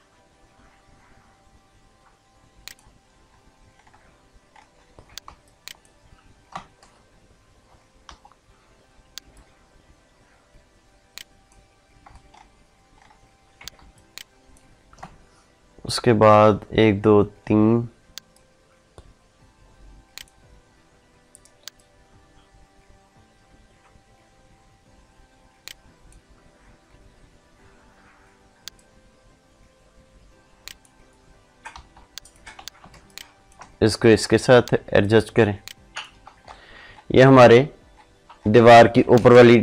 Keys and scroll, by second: 5.0 ctrl+space, 13.5 ctrl+space, 32.7 ctrl+space, 39.1 ctrl+space.